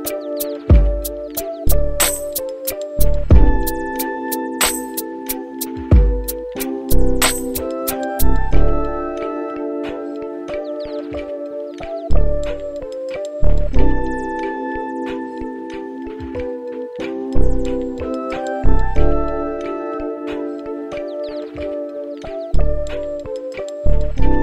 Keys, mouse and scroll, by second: 10.7 click, 16.5-23.1 drag, 24.2 click.